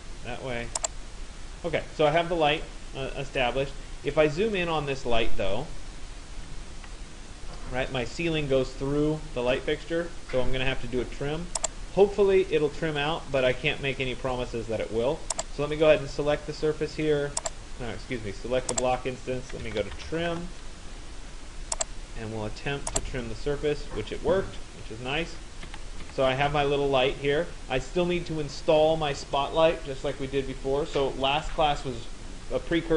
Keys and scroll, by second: 6.3 Escape, 19.7 Return, 25.2 Escape.